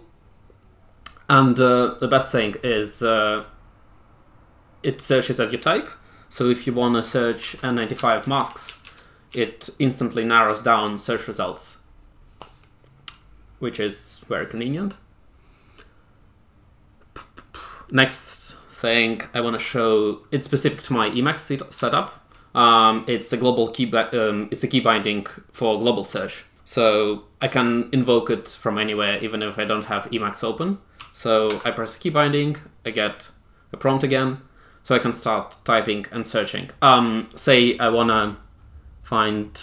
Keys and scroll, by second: 7.3-9.7 typing, 19.5 Escape, 21.7 super+e, 31.4 super+F1.